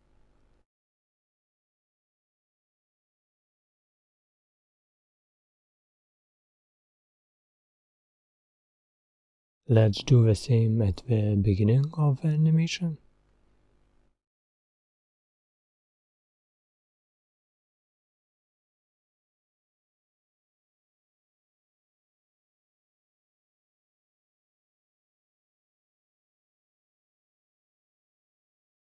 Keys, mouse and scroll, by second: 1.6 click, 7.5-20.3 drag, 22.6-28.9 drag.